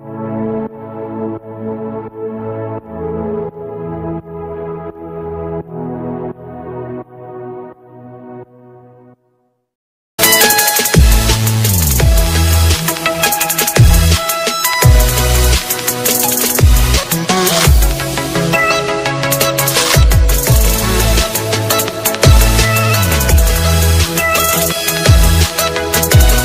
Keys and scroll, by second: 4.0 ctrl+space, 13.5 ctrl+space, 24.1 ctrl+v, 25.4 ctrl+c.